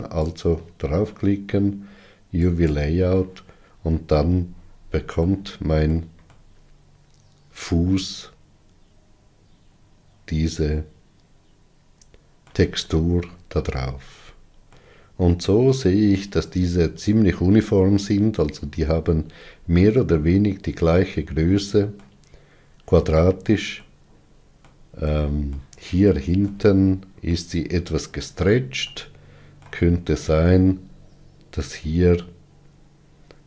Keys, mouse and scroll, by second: 0.5-4.5 drag, 4.5-5.1 scroll up 3, 5.6-9.9 shift+middle drag, 10.0 middle click, 10.5-12.1 middle drag, 13.8-14.5 scroll up 3, 15.0-30.9 middle drag, 30.9-31.8 scroll up 3.